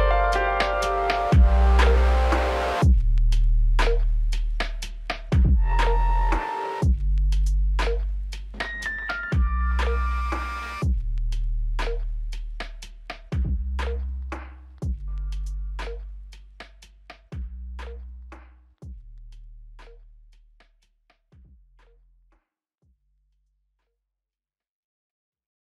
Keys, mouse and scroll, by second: 15.6 typing.